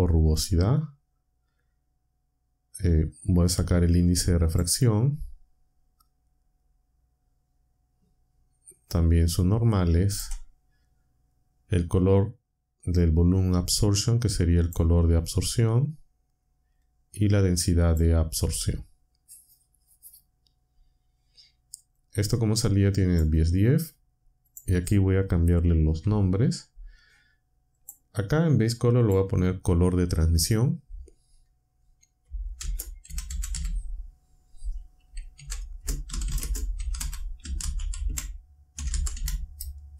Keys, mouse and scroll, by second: 3.3-4.7 drag, 8.9-10.3 drag, 13.0-14.9 drag, 16.8-18.1 drag, 22.0-23.3 drag, 24.4 click, 26.0 n, 27.8 click, 29.0 click, 32.3-34.0 typing, 35.3-39.9 typing.